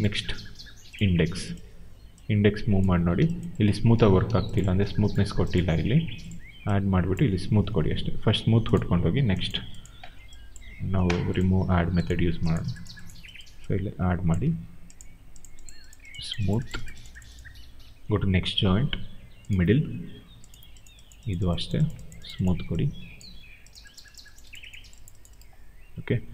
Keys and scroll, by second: 3.9 ctrl+z, 4.2 q.